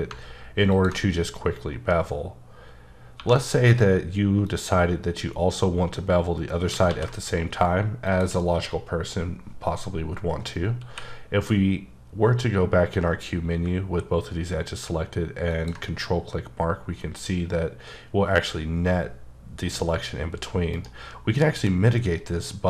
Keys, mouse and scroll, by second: 0.7 ctrl+click, 1.7-2.5 scroll up 4, 2.5-3.2 scroll up 1, 3.2 1, 4.4 click, 6.8 ctrl+z, 8.0 shift+click, 10.8 q, 13.6 ctrl+q, 15.5 click, 17.6-18.7 scroll up 4, 18.7-20.7 scroll up 1, 20.7 right click.